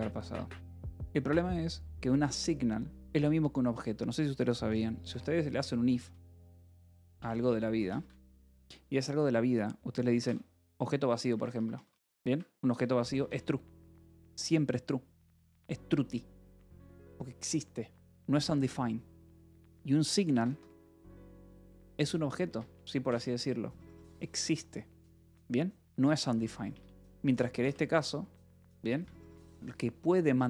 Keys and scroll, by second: 1.4-3.5 typing, 5.4-8.6 typing, 10.6 shift+[, 10.7 shift+], 11.2 Escape, 12.2 Escape, 12.3-14.4 typing, 14.0 Escape, 17.8 Escape, 20.0-23.6 typing, 22.4 Escape, 26.2 Escape, 26.3-28.1 typing, 28.8 Escape.